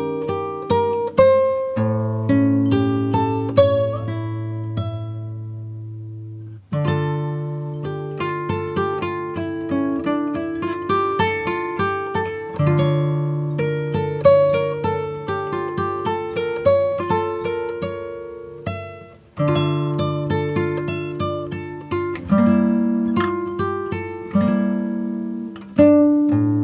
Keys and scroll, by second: 24.8 ctrl+8.